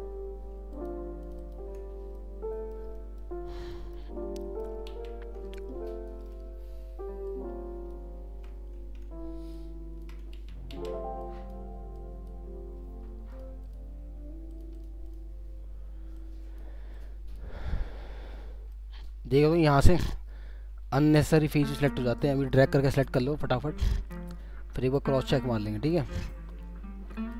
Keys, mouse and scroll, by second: 0.7 ctrl+click, 2.1 alt+middle click, 3.3 scroll down 1, 3.7 alt+middle click, 4.1 scroll up 1, 4.9 ctrl+z, 6.3 alt+middle click, 10.4 ctrl+z, 10.7 ctrl+z, 11.2 ctrl+click, 13.3 ctrl+click, 13.6 ctrl+double click, 14.5 ctrl+click, 14.7 ctrl+double click, 16.1 ctrl+click, 17.7 ctrl+scroll down 1, 18.3-18.7 scroll up 2, 18.7 alt+middle click, 20.3 scroll up 1, 21.0 ctrl+click, 22.3 ctrl+click, 24.1 ctrl+click, 25.2 ctrl+click, 26.5 ctrl+click.